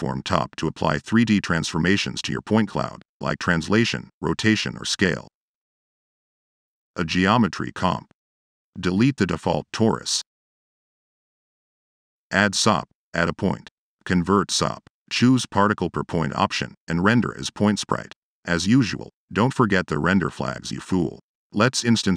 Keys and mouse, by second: 0.2-1.0 typing, 0.2 click, 3.5-4.1 drag, 4.6 click, 5.0 click, 5.1-5.9 typing, 6.0 click, 6.6 click, 7.9 drag, 10.2 click, 10.4 Delete, 11.1 click, 11.3 Tab, 12.0 drag, 13.2 click, 14.0 right click, 14.6 o, 16.0 click, 17.2 click, 17.4 drag, 17.9 drag, 18.2 click, 18.8 click, 19.3 click, 22.0 click.